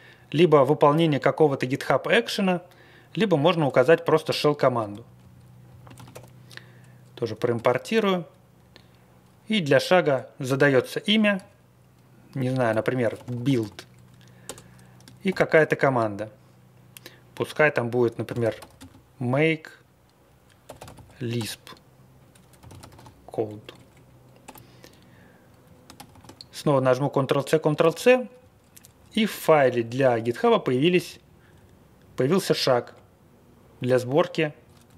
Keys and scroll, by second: 4.3 Return, 4.7 space, 5.2 BackSpace, 5.6 BackSpace, 5.9 ctrl+c, 6.1 i, 7.5 space, 12.4-14.0 typing, 14.4 Return, 15.2 shift+', 18.0-19.0 typing, 20.4-23.3 typing, 23.5 Right, 23.7 Right, 23.8 Right, 24.4 BackSpace, 25.6 Up, 25.9 ctrl+c, 26.2 ctrl+c, 27.8 ctrl+x, 27.9 o, 28.3 Down, 28.6 Down, 28.7 Down, 28.9 Down, 29.1 Down, 29.6 Up, 29.8 Up, 29.9 Up, 30.1 Up, 30.3 Up, 31.0 Down, 31.2 Down, 31.4 Down, 31.5 Down, 32.4 Up, 32.6 Up, 32.9 Right, 33.2 Right, 33.3 Right, 33.3 Right, 33.4 Right, 33.4 Right, 33.5 Right, 33.7 Right, 33.8 Down, 34.4 Down, 34.8 Up.